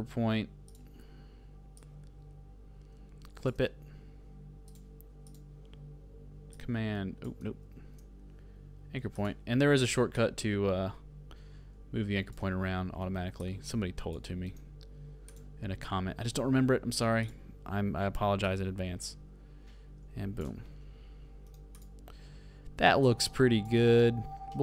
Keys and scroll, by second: 7.6 super+z, 13.0 super+h, 21.4 super+v.